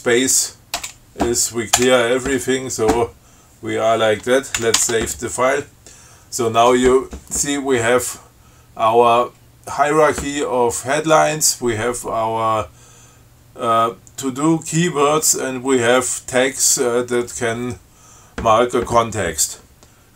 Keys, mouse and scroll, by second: 0.9 space, 1.9 Return, 4.7 ctrl+x, 4.9 ctrl+s.